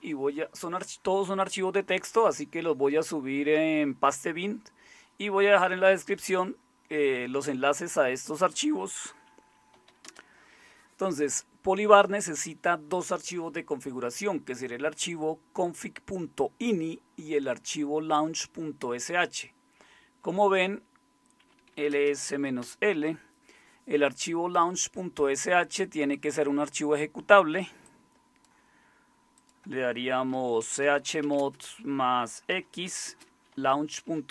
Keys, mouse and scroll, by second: 9.5-10.4 typing, 21.3-22.8 typing, 30.2-34.2 typing.